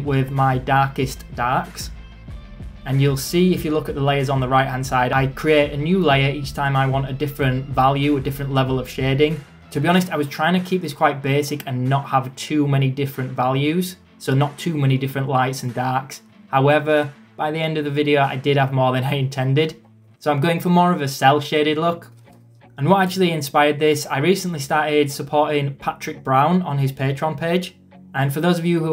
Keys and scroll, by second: 16.8 ctrl+z, 19.0 ctrl+z, 19.5 ctrl+z, 22.0 [, 22.9 ctrl+z.